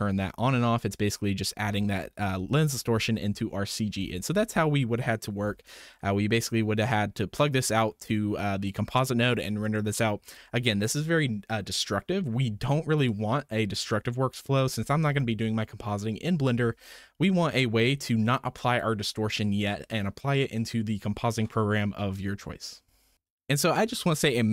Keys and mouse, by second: 0.4 m, 1.0 click, 1.6 m, 2.4 m, 4.0 m, 5.4 m, 6.0-6.4 drag, 7.3-9.4 drag, 13.0-14.4 drag, 17.2-18.9 drag.